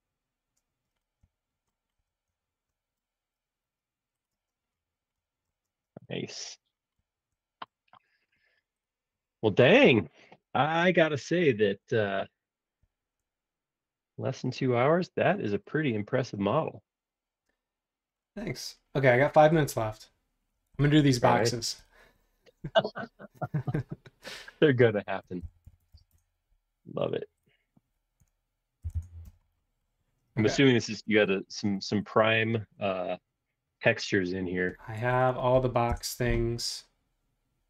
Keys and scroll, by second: 0.9 Up, 4.4 space, 5.6 space, 22.7 r, 25.0-27.0 typing, 28.2-29.2 typing, 30.4 Return, 30.4 ', 30.4 space, 36.0 Return.